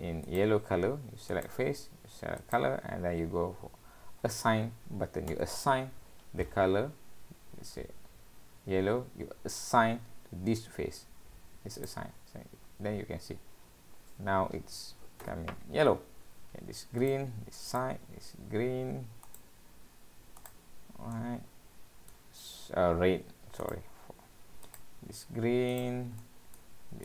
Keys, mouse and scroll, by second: 0.3 click, 1.7 click, 2.4 click, 3.0 scroll down 2, 17.0 click, 17.7 click, 19.3 click, 21.0 click, 21.1 middle click, 23.6 click, 24.7 click, 25.8 click, 26.2 middle click.